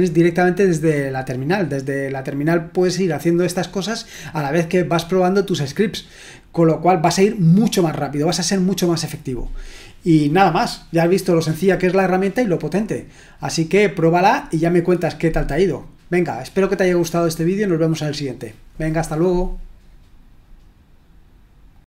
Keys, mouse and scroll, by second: 21.7 click.